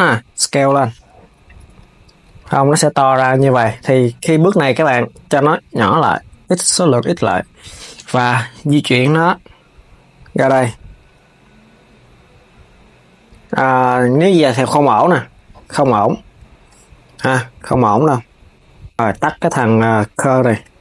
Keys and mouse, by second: 1.4 Tab, 5.2-7.7 drag, 7.7 KP_3, 8.7 g, 20.2-20.8 drag.